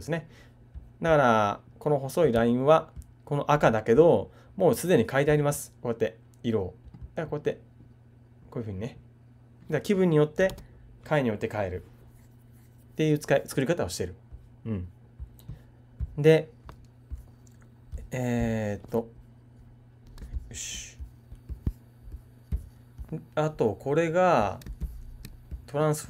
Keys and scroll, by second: 10.5 super+z.